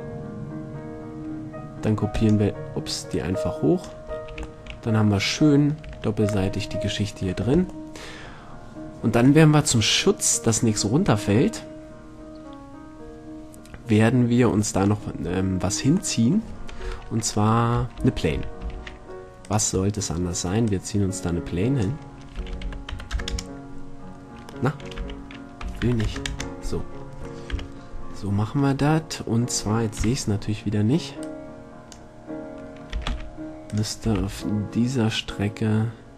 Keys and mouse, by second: 0.3 middle click, 3.3-4.8 drag, 4.5 a, 6.0 Tab, 8.3 middle click, 15.4-17.0 middle drag, 17.0 KP_7, 18.5 a, 20.1-20.8 middle drag, 20.8-21.8 drag, 22.0 click, 22.6 r, 25.2 r, 27.1-29.1 middle drag, 27.7 KP_1, 30.2 KP_8, 33.1 s, 34.0-35.9 drag, 34.2 s.